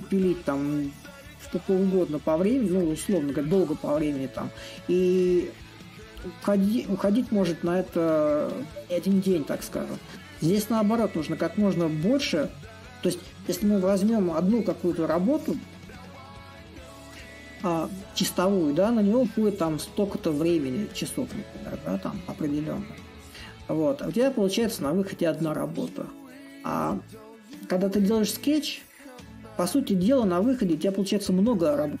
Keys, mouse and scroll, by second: 0.0-1.7 drag, 1.7 a, 3.7-6.0 drag, 8.9-13.9 drag, 15.6-20.6 drag, 21.3-26.3 drag, 27.0-32.0 drag.